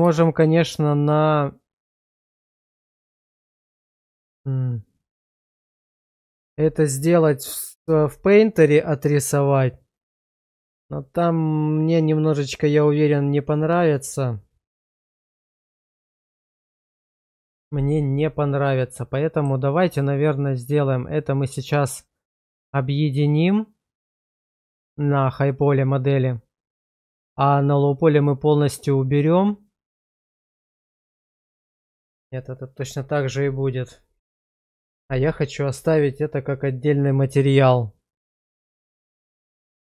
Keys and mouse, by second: 0.2 shift+middle drag, 5.4-6.4 middle drag, 18.8-19.4 middle drag.